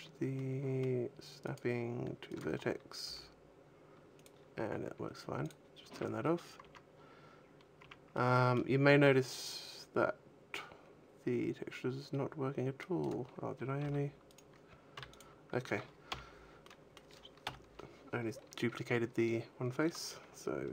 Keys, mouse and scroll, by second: 0.2 middle click, 1.3 click, 2.9 g, 4.1 click, 5.3 click, 5.8 a, 6.2-6.8 scroll down 3, 6.5 Tab, 6.8-7.3 scroll up 3, 7.5 scroll down 1, 7.7 Tab, 8.0 middle click, 9.0 middle click, 12.9 right click, 13.7 g, 14.2 right click, 14.8 x, 15.8 l, 16.4 middle click, 17.3 KP_1.